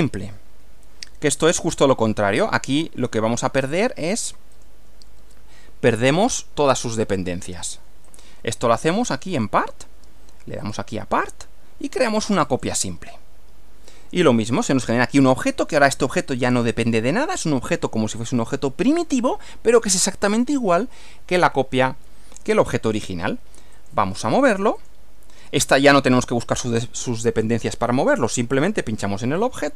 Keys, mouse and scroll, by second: 1.6 click, 4.6 click, 8.1 click, 9.4 click, 10.6 click, 12.4 click, 15.6 click, 23.8 click, 24.8 click, 28.5 click.